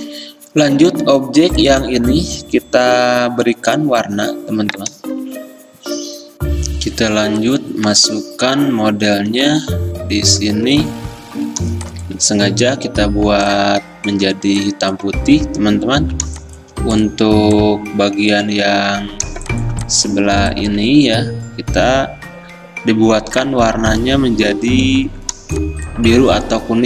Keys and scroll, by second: 8.0 alt+Tab, 9.4 alt+Tab, 18.6 ctrl+z, 19.4 ctrl+z, 21.1 ctrl+z.